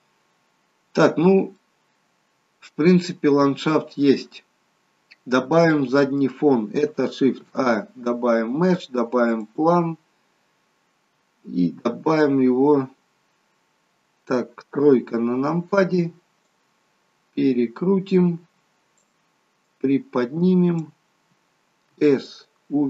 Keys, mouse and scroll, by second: 0.2 scroll up 1, 1.2 scroll down 2, 1.6 middle click, 5.3 scroll down 2, 5.7 middle click, 7.4 shift+a, 10.9-11.4 scroll up 3, 14.8 KP_3, 16.5 click, 19.7 click, 22.0 s.